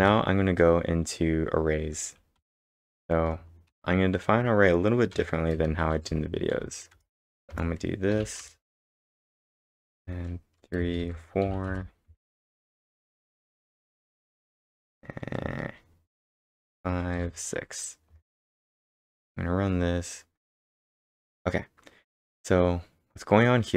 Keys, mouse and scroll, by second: 0.0 ctrl+Return, 2.1-3.7 typing, 5.1-6.5 typing, 8.4 Return, 9.0 Tab, 9.6 space, 10.0 3, 10.8 space, 11.0 4, 11.7 Return, 12.1 space, 12.6 Tab, 13.0 Tab, 14.1 space, 14.4 space, 15.4 space, 16.4 5, 16.7 space, 17.1 6, 18.1 Right, 18.3 Right, 18.7 ctrl+Return, 21.1-21.8 typing.